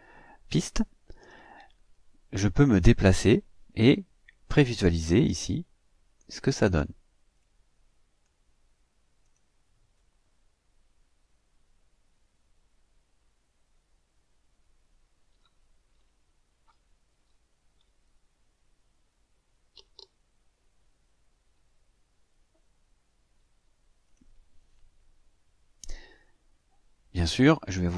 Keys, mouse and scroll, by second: 2.6 click, 7.3 click, 9.2 click, 24.0 click.